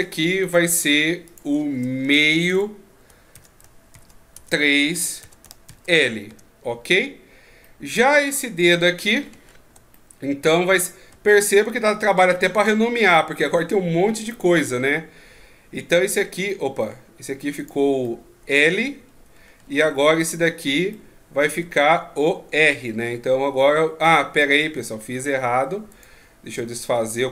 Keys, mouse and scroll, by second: 0.4 right click, 1.3 click, 7.6 middle click, 8.4-9.4 scroll down 5, 9.4-9.9 shift+scroll up 5, 9.9 middle click, 10.7 scroll down 1, 11.6 shift+scroll down 2, 13.0 right click, 14.2 right click, 16.5 middle click, 17.6 right click, 18.0 middle click, 19.1-19.7 ctrl+scroll down 14, 20.5 right click, 20.9 middle click, 22.1-22.7 scroll up 2, 23.1-23.6 scroll down 3, 24.4 middle click, 25.9 right click, 26.4 ctrl+z, 26.8 ctrl+z, 26.9 ctrl+z, 27.2 ctrl+z.